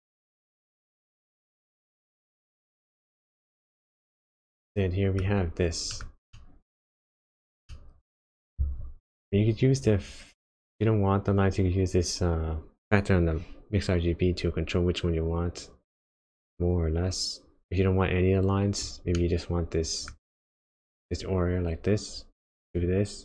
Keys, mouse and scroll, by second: 3.1 middle click, 5.9 middle click, 6.3 middle click, 7.7 middle click, 9.8 click, 19.3 middle click, 22.8 click.